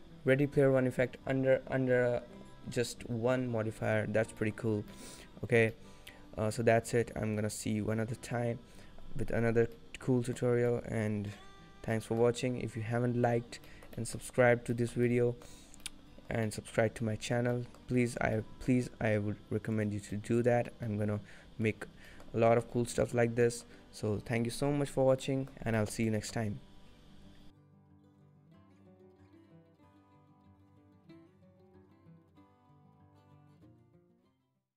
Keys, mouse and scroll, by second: 4.3-5.2 scroll down 6, 4.5 middle click, 5.0 middle click, 5.8 middle click, 9.8 middle click, 10.6 scroll up 3, 10.8 middle click, 11.5-11.8 scroll down 3, 12.0 middle click, 13.8 shift+middle click, 14.1 middle click, 14.7 scroll up 1, 14.8 shift+middle click, 15.2 middle click, 15.7 scroll down 5, 15.9 middle click, 15.9 scroll up 1, 16.6 middle click, 17.0-17.3 scroll up 2, 17.1 middle click, 17.6 middle click, 18.0 scroll down 1, 18.2 shift+middle click, 18.6 middle click, 18.8-19.5 scroll down 2, 19.9 click, 20.2 middle click, 21.0 middle click, 21.1 shift+middle click, 21.6 middle click, 21.8-23.1 scroll up 5, 22.2 shift+middle click, 22.8 middle click, 23.2-24.1 scroll down 4, 23.6 middle click, 24.9 scroll down 1, 25.3 middle click, 25.9 shift+middle click, 26.2 middle click.